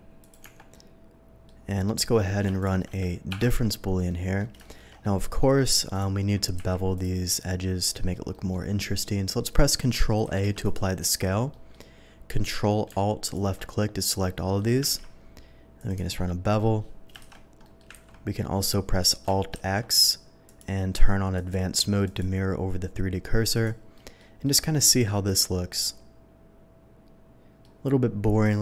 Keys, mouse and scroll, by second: 0.2 click, 0.4 Tab, 0.7-1.4 middle drag, 2.0 middle drag, 2.6 shift+click, 3.3 ctrl+KP_Subtract, 4.1 ctrl+middle drag, 4.6 shift+middle drag, 4.9 shift+middle click, 5.4 shift+middle drag, 5.9 shift+click, 6.5 q, 6.9 click, 7.2 click, 8.3 middle drag, 10.6 ctrl+a, 10.6 ctrl+click, 11.0 Tab, 11.5 middle click, 13.2 ctrl+alt+click, 14.4 ctrl+alt+middle click, 14.8 ctrl+b, 15.8 click, 15.9 Tab, 16.4 middle drag, 17.2 shift+2, 17.6 middle drag, 17.9 ctrl+z, 19.5 alt+x, 20.4 click, 21.3 click, 22.0 click, 23.5 click, 23.9 middle drag, 24.4 middle drag, 25.2 click, 25.5-27.6 middle drag, 28.4 click.